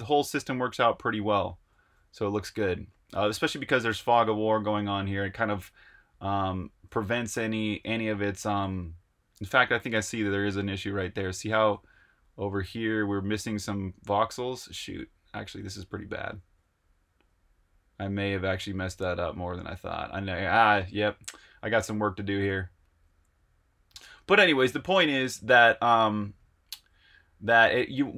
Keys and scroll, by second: 1.4-2.1 typing, 3.5 typing, 4.6-8.6 typing, 11.3-14.0 typing, 15.2-17.2 typing, 24.6-25.2 typing, 26.4-27.2 typing.